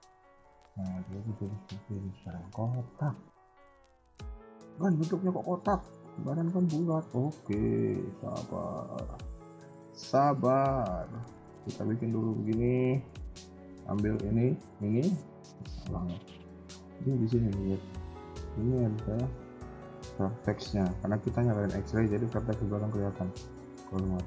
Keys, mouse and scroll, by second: 2.1 scroll down 4, 2.2 KP_1, 2.4 KP_3, 2.7 KP_1, 2.9 scroll up 2, 4.0 a, 4.3 a, 4.7 a, 5.1 a, 5.5 shift+middle click, 5.9 middle click, 8.6 click, 9.1 KP_1, 9.5 scroll up 2, 9.9 shift+middle click, 10.7 b, 12.5 KP_3, 13.5 shift+click, 14.8 shift+click, 15.0 KP_1, 15.3 a, 15.5 a, 16.5-18.5 scroll up 9, 16.8 shift+middle click, 21.9 click.